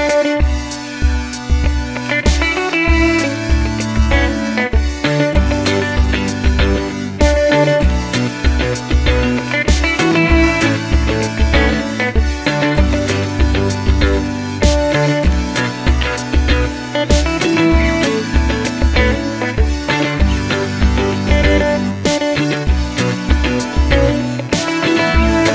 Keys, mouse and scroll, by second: 0.3 click, 0.8-1.6 middle drag, 1.6 scroll down 1, 2.3 shift+middle click, 2.9 scroll up 1, 3.1 click, 3.4 Tab, 4.0 shift+middle click, 4.4 click, 5.0 alt+click, 5.4 middle click, 6.5 shift+s, 6.7 middle click, 7.6 z, 7.9 middle click, 11.2-11.8 scroll up 1, 13.1 middle click, 13.8 2, 14.2 alt+click, 15.2 shift+s, 15.4 middle click, 16.4 shift+d, 17.1 Tab, 17.7 click, 18.8 Tab, 19.0 a, 19.7 scroll up 2, 19.8 shift+middle click, 20.2 click, 20.4 shift+click, 21.2-23.0 typing, 21.5 click, 21.7 shift+click, 22.2 scroll down 1, 22.5 middle click, 24.2 middle click.